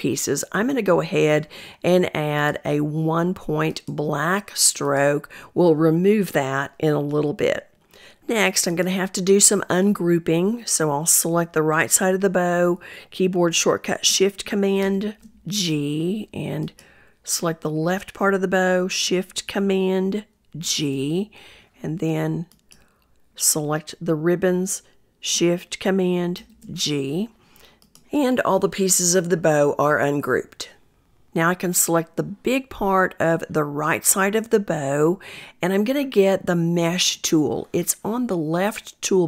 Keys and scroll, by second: 12.4 ctrl+shift+super+g, 18.9 shift+super+g, 25.2 ctrl+shift+super+g, 26.3 shift+super+g.